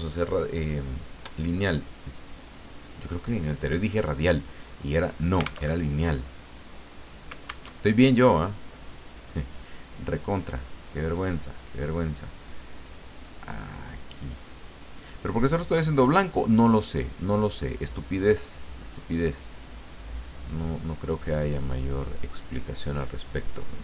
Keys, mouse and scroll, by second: 0.6 click, 5.7 alt+Tab, 7.7 alt+Tab, 8.9 click, 10.4 click, 13.5-15.2 drag, 15.9-21.5 drag, 22.5 click.